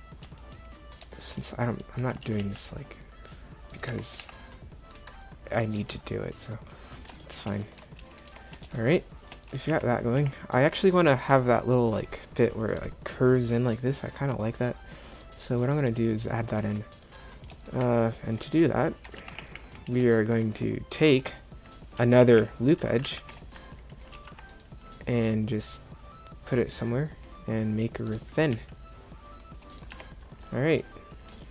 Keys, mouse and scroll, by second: 2.2 g, 3.9 Tab, 4.2 z, 8.0 Tab, 8.3 Tab, 9.7 Tab, 10.2 a, 18.5 z, 19.2 z, 19.9 z, 22.0 a, 22.4 a, 23.1 z, 24.2 ctrl+r, 28.5 s, 30.0 Tab.